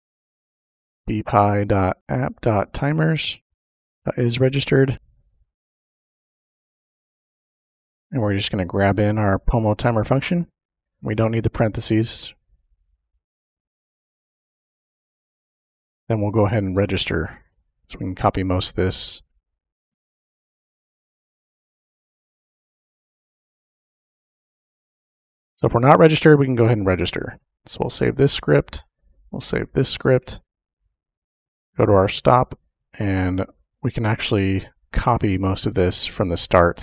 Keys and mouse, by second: 0.9-5.4 typing, 5.6 Left, 5.7 Left, 5.8 Left, 6.0 Left, 6.1 Left, 6.3 Left, 6.6 Left, 6.9-8.5 typing, 7.7 Right, 9.4-11.3 drag, 11.8 ctrl+c, 12.9 click, 13.5 ctrl+v, 14.6 shift+0, 15.9 shift+;, 16.0 Return, 17.4-18.7 drag, 19.2 ctrl+c, 19.5 click, 20.2 ctrl+v, 21.6 click, 23.1 BackSpace, 23.2 BackSpace, 24.4 click, 24.6 BackSpace, 24.8 BackSpace, 25.0 BackSpace, 25.4 click, 27.6 click, 33.7 click, 35.5 click.